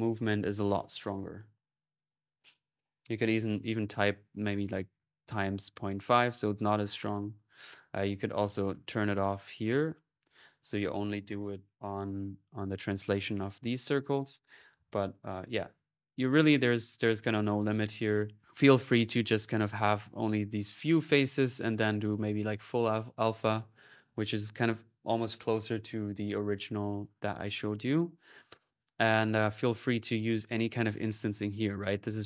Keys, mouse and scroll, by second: 3.3 click, 5.7 click, 7.8 click, 8.4 click, 9.1 click, 9.5 click, 10.2-11.6 drag, 11.6 middle click, 11.8 click, 12.2 typing, 14.2-14.9 typing, 16.2 ctrl+click, 16.8 right click, 17.6 click, 18.5 ctrl+s, 20.5-21.5 drag, 21.6 click, 22.3-23.6 drag, 28.3-29.7 drag, 31.9 click.